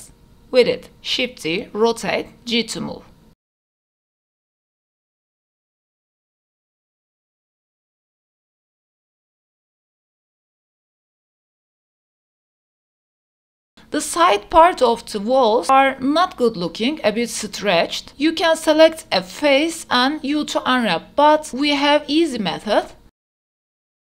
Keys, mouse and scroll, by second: 0.0-13.5 typing, 0.6 shift+click, 0.6 shift+middle click, 0.7 click, 1.6 shift+middle click, 2.3 shift+middle click, 2.8 shift+middle click, 2.9 shift+middle click, 2.9 scroll down 1, 3.5 click, 4.1 shift+middle click, 4.4 shift+middle click, 4.5 click, 5.1 shift+middle click, 5.7 shift+middle click, 5.9 click, 7.2 shift+middle click, 7.3 click, 7.5 click, 9.1 click, 9.4 click, 9.8 shift+middle click, 9.9 click, 10.7 click, 11.9 shift+middle click, 13.7 middle click, 14.1 click, 14.5 Tab, 14.7 middle click, 15.6 click, 16.5 u, 18.5 middle click, 19.1 Tab, 19.7-20.2 middle drag, 20.4 Tab, 21.2 Tab, 22.1 click, 22.5 Tab, 22.7 click, 23.2 u.